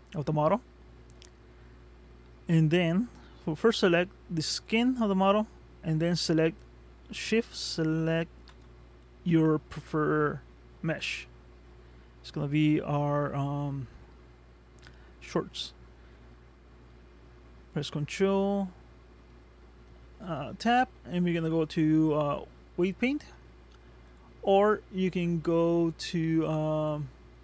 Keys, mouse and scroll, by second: 3.8 click, 4.7 click, 8.5 shift+click, 9.6 middle click, 18.5 ctrl+Tab.